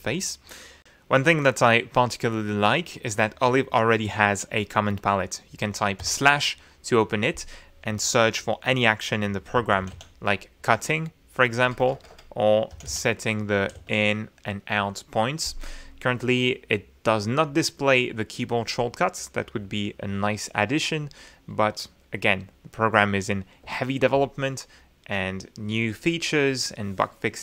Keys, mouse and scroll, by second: 23.2 Escape.